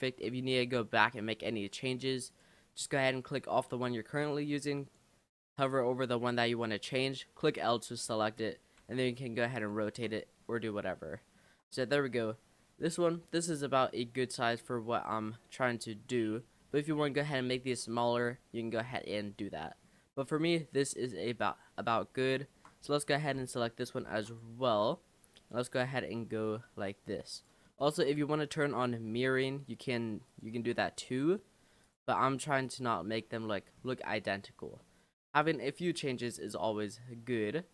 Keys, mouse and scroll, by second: 0.4 shift+middle click, 1.3-1.9 scroll up 2, 1.9-2.3 scroll up 1, 3.2 click, 7.4 l, 8.8 r, 9.9 ctrl+z, 10.1 click, 10.4 scroll down 5, 11.1-16.9 shift+middle drag, 16.9-17.9 scroll down 1, 17.9-18.3 scroll down 1, 18.3-21.4 middle drag, 21.4 click, 21.8-22.3 scroll up 3, 22.3-23.4 shift+middle drag, 23.4 l, 24.1 shift+d, 24.9 g, 25.9 r, 27.7 shift+middle click, 28.2-28.6 scroll up 3, 29.2 g, 31.2 r, 32.1 g, 33.2 middle click, 33.5-34.1 scroll down 3, 34.1 middle click, 34.6 scroll down 2, 34.8-37.7 middle drag.